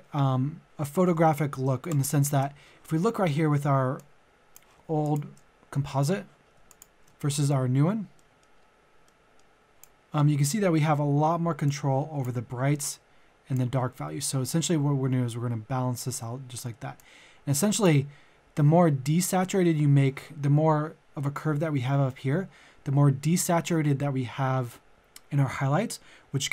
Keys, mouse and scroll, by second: 1.0 click, 1.9 shift+click, 5.0 ctrl+click, 8.2 middle click, 8.6-9.1 scroll down 1, 9.1 middle click, 9.8-26.5 drag.